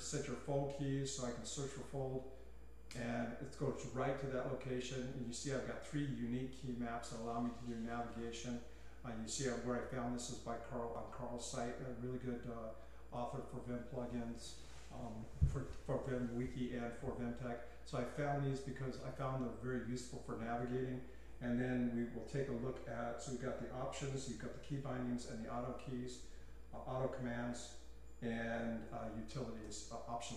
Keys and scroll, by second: 1.1-2.9 typing.